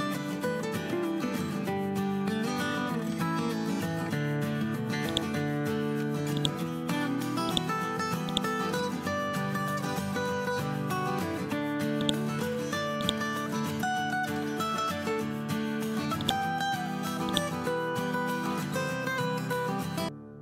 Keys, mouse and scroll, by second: 1.0 F12, 1.5 Tab, 3.1 2, 3.3 Return, 5.0-10.4 drag, 17.2 right click, 18.2 ctrl+End.